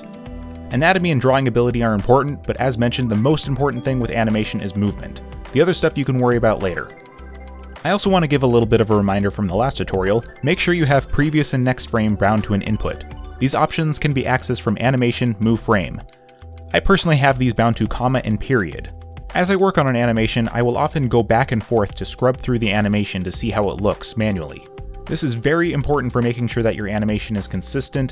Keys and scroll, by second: 18.1 space, 19.8 x, 23.6 space, 24.5 space, 24.8 z, 25.3 b, 26.3 ctrl+z.